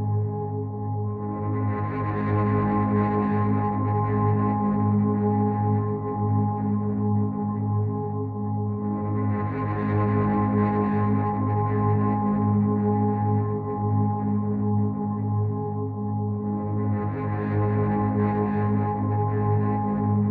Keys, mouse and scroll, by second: 0.7 alt+click, 9.8 click.